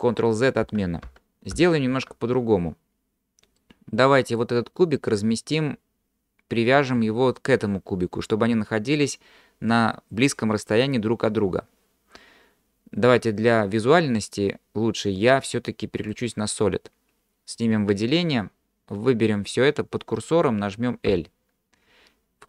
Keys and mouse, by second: 0.7 ctrl+z, 1.1 ctrl+z, 3.6 middle click, 16.1 click, 21.1 l.